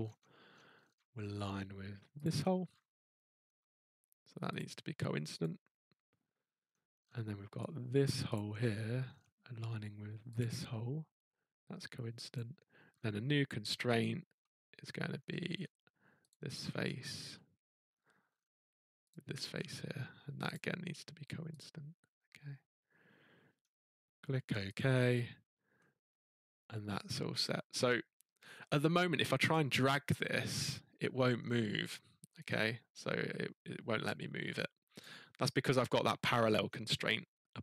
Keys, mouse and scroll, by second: 2.2 click, 2.7-3.4 scroll, 4.5 click, 5.4 click, 6.4-7.0 scroll, 6.9 middle click, 8.3 click, 8.7-9.2 scroll, 10.4 click, 12.3 click, 12.9-13.8 scroll, 15.1 middle click, 15.4 scroll, 16.3 click, 16.7 scroll, 17.9 middle click, 18.3 middle click, 18.3 middle click, 18.4 middle click, 19.1 click, 19.2-19.7 scroll, 20.5 click, 21.6 click, 23.5 scroll, 24.7 click, 27.4-28.6 scroll, 29.5 click, 29.8-30.5 scroll, 31.2 scroll, 32.4 click, 35.0 click, 36.6-37.6 scroll.